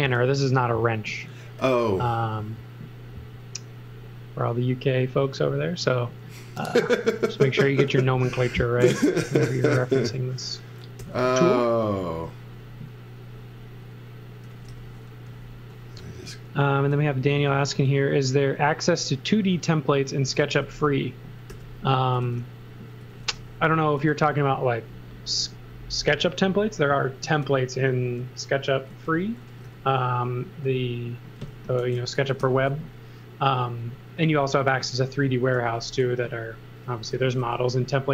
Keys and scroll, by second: 1.6 n, 5.8 x, 6.9 n, 9.2 x, 9.5 v, 11.0 n, 14.2-15.2 typing, 17.7 space, 20.1-24.0 typing, 25.4 n, 28.0-30.1 typing, 31.6-32.9 typing, 34.6 x, 34.9 v, 35.5 x, 36.0 z, 37.1 x, 37.4 v.